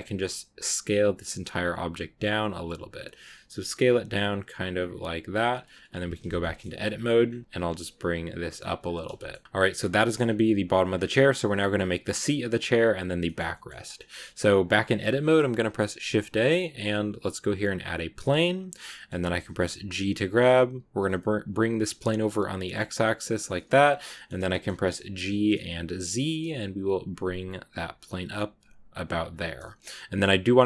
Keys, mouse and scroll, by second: 6.3 shift+middle click, 6.8 scroll up 2, 7.4 g, 8.7 scroll down 1, 8.7 scroll up 1, 8.8 scroll down 1, 9.0-10.1 shift+middle drag, 10.1 Tab, 10.6 scroll up 2, 12.0 scroll up 2, 12.0 scroll down 2, 13.1 middle click, 13.3 scroll up 2, 13.4 middle click, 13.8 scroll up 1, 14.0 Tab, 15.1 shift+a, 18.1 scroll up 1, 18.1 scroll down 2, 18.8-19.8 middle drag, 19.8 g, 23.4 middle click, 23.6 scroll up 2, 24.0 middle click, 24.2 scroll down 1, 24.4 shift+middle click, 25.0 g, 29.5-30.6 middle drag.